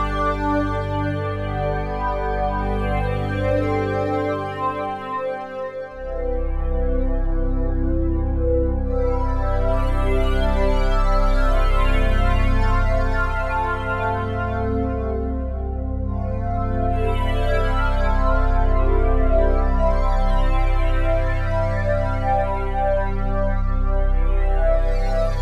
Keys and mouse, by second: 0.2 ctrl+alt+click, 0.9-3.0 alt+drag, 3.5 1, 4.9 alt+shift+click, 5.3 alt+click, 6.1 alt+shift+click, 6.5 alt+click, 7.2 alt+shift+click, 7.7 alt+click, 8.6-9.2 typing, 9.2 alt+shift+click, 9.6 ctrl+alt+click, 10.2 alt+shift+click, 10.6 ctrl+alt+click, 11.3 ctrl+alt+click, 12.1 click, 14.2 typing, 14.7 Escape, 15.4-16.9 drag, 18.0 shift+click, 19.0 g, 19.9 click, 20.5 click, 20.7 g, 21.5 click, 23.2 click, 23.5 click, 24.5 click.